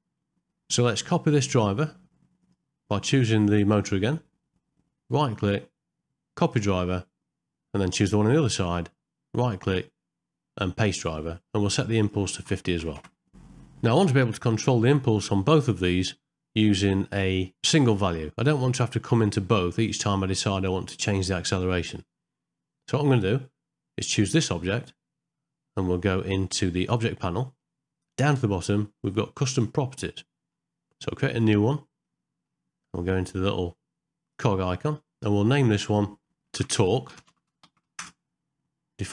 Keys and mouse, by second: 0.5 middle click, 5.4-6.6 right drag, 9.5-10.9 right drag, 12.1 click, 26.9 click, 27.7 middle click, 29.6 click, 30.1 middle click, 31.4 click, 32.1 middle click, 34.4-39.1 drag.